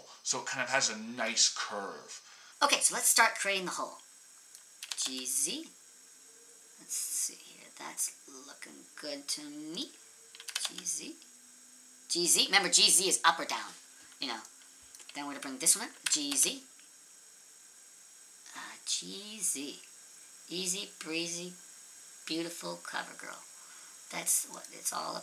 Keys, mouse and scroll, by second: 2.5 ctrl+z, 2.5 click, 2.6 click, 4.8 g, 10.4 g, 16.0 g, 24.6 middle click.